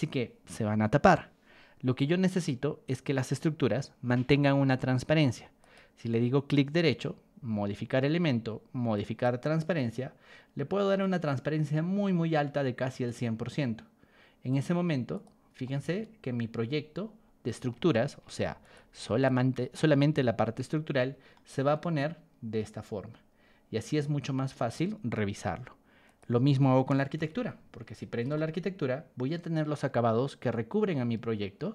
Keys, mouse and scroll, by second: 3.2 click, 5.6 right click, 8.9 click, 11.0 click, 14.5 click, 15.1 click, 15.6-17.6 shift+middle drag, 18.3 ctrl+1, 18.6 click, 19.2 ctrl+click, 20.4 Escape, 20.8 click, 21.3-24.7 shift+middle drag, 26.0 click, 27.1 ctrl+h, 27.7 Escape, 28.3-31.7 shift+middle drag.